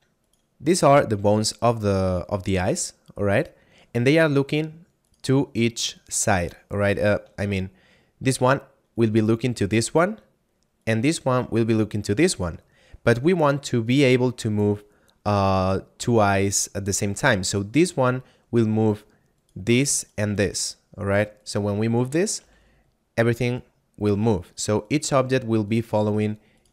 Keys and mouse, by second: 0.3 right click, 5.0 right click, 7.5 shift+middle click, 8.9 right click, 17.4 right click, 20.1 shift+right click, 21.3 shift+right click, 22.3 g, 24.3 right click, 25.7 shift+right click, 26.5 right click.